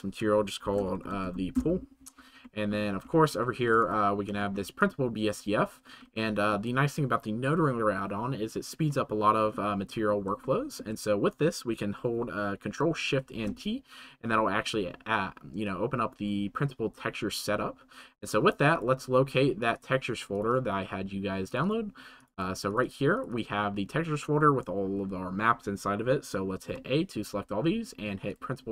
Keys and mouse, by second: 3.5 shift+middle click, 4.4 shift+middle click, 4.8 middle click, 10.4 shift+middle click, 13.4 ctrl+shift+t.